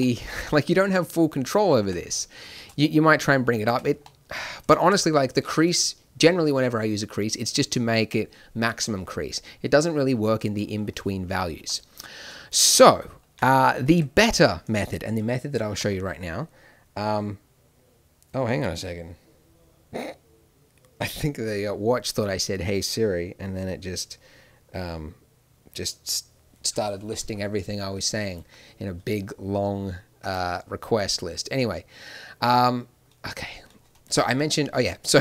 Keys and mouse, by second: 1.8 Tab, 2.5 shift+e, 3.6 Tab, 11.5 shift+e, 13.8 Tab, 15.7 n, 28.3-35.2 drag.